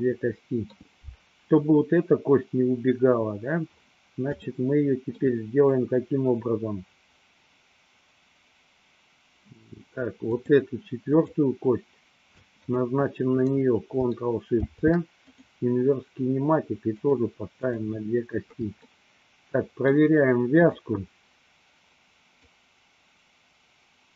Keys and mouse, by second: 0.2-0.9 shift+middle drag, 4.7 shift+middle click, 11.3 click, 12.8 shift+drag, 14.4 ctrl+shift+c, 17.0 click, 17.9 click, 18.9-20.2 shift+middle drag, 20.8 click, 22.4-24.1 drag.